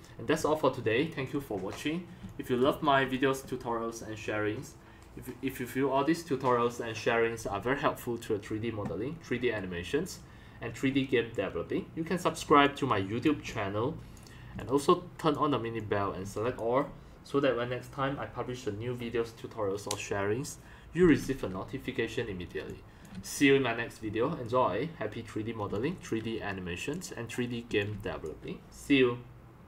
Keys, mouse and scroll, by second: 2.2 x, 2.2-2.6 drag, 2.6 c, 2.8-3.1 drag, 12.5 c, 12.6-13.0 drag, 13.4 x, 13.5 click, 14.5 c, 14.6 click, 15.7 x, 16.2 c, 22.7-23.0 drag, 22.7 x, 23.1 c, 25.7 c, 25.7 click, 26.9 click, 27.7 x, 28.1 c.